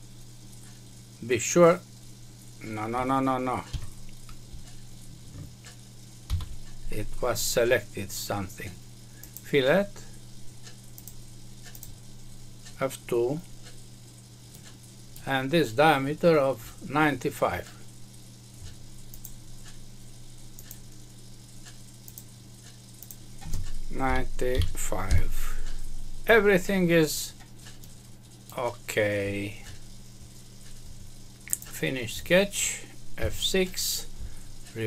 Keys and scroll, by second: 3.7 Escape, 6.2 ctrl+z, 25.0 Return, 33.1 F6.